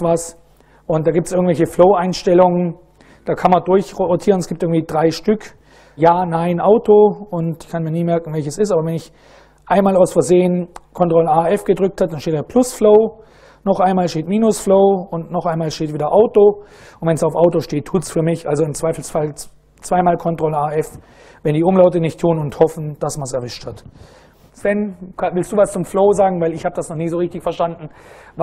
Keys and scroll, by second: 3.9 super+Right, 8.5 ctrl+a, 9.2 f, 13.0 ctrl+a, 13.5 ctrl+f, 14.5 ctrl+a, 15.0 f.